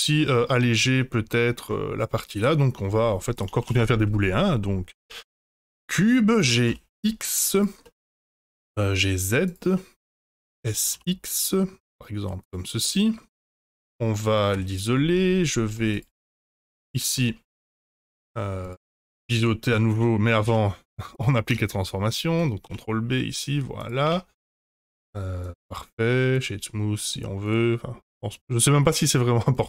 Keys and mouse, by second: 0.1 shift+middle drag, 0.9-1.5 middle drag, 3.3 click, 3.6 shift+a, 6.0 middle drag, 6.3 g, 7.8 middle drag, 8.2 g, 9.7-10.4 middle drag, 10.7 s, 12.8-13.1 middle drag, 15.1 Tab, 15.9 2, 15.9 click, 16.2 middle click, 16.8 shift+click, 17.1 middle click, 18.0 shift+click, 18.6 shift+click, 18.9 middle click, 19.9 Tab, 20.4 ctrl+a, 21.4 Tab, 22.6 ctrl+b, 24.0 Tab, 24.5-24.9 middle drag, 25.7 click, 27.4 click, 29.0 click.